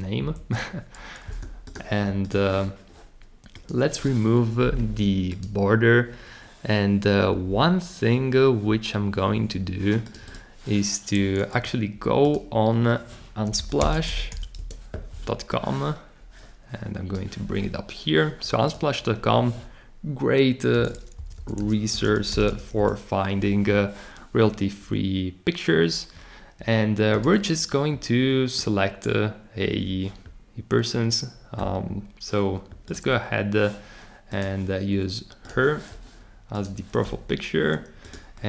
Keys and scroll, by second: 0.2 shift+Left, 13.3-14.8 typing, 20.5-23.0 typing.